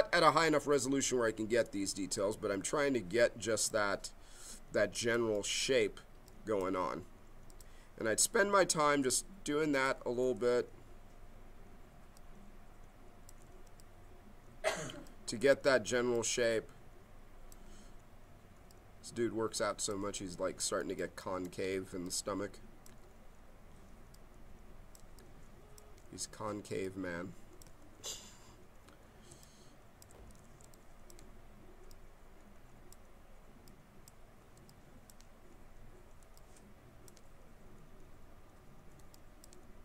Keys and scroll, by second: 9.0 b, 28.3 ctrl+z, 29.3 b.